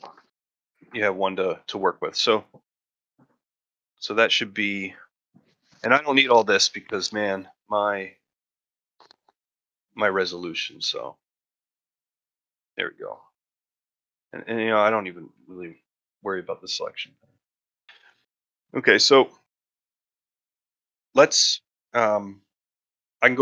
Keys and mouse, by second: 0.7-1.2 ctrl+shift+middle drag, 3.0-5.0 drag, 8.1-8.7 middle drag, 9.3-12.2 drag, 14.1-17.4 drag, 17.4-17.7 middle drag, 17.8 middle click, 18.9 middle click, 19.6 ctrl+middle click, 19.9 shift+middle drag, 20.2 middle drag, 20.5 shift+middle drag, 21.0 middle drag, 21.4 middle drag, 21.9 shift+middle click, 22.2-22.6 middle drag.